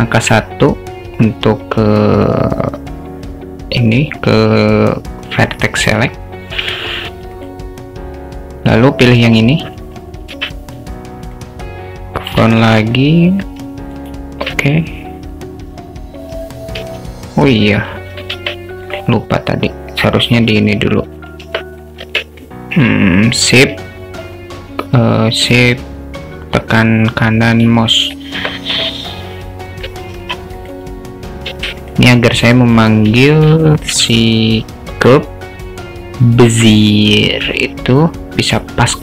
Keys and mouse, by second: 11.4 `, 12.5 alt+shift+middle click, 13.9 shift+middle click, 17.2 `, 18.3 `, 21.5 Tab, 22.0 Tab, 26.5-27.7 shift+right drag, 28.5 Tab, 28.9-29.8 alt+middle drag, 33.4 shift+a.